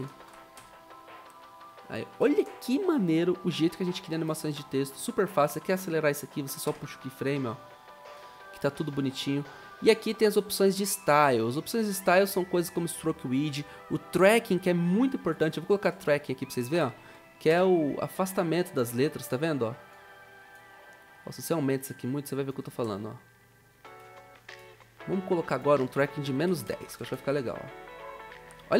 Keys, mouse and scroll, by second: 0.5 typing, 1.9-2.8 typing, 16.5-17.5 typing, 22.8 0, 26.4-27.6 typing.